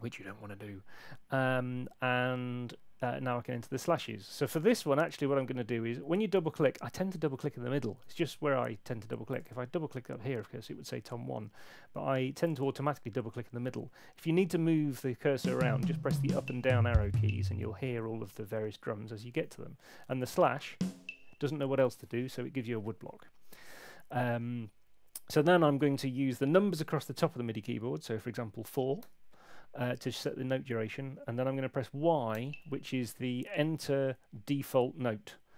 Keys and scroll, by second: 8.5 Escape, 11.3 Escape, 15.3 Up, 20.6 Up, 29.0 4, 32.3 y.